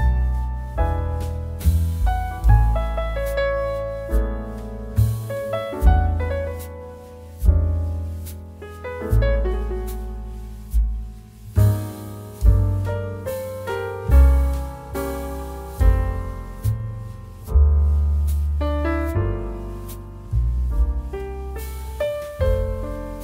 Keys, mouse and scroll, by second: 0.1 click, 4.9 click, 6.2 g, 6.2 z, 7.7 click, 8.7 Tab, 9.1 alt+z, 12.4 s, 14.5 click, 17.0 ctrl+b.